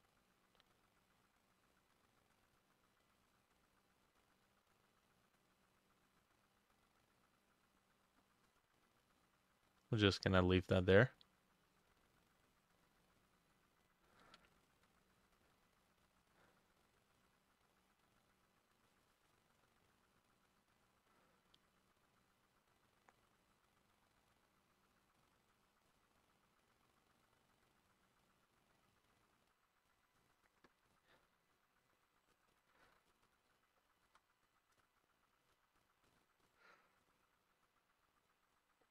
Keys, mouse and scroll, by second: 1.5 double click, 10.7-24.5 drag, 14.4 ctrl+middle click, 28.3-30.3 drag, 32.6-36.8 ctrl+drag, 32.7 ctrl+middle click, 32.9 ctrl+c, 33.3 ctrl+c, 33.5 middle click, 33.5 ctrl+v, 34.1 BackSpace, 34.5 5, 34.8 Return.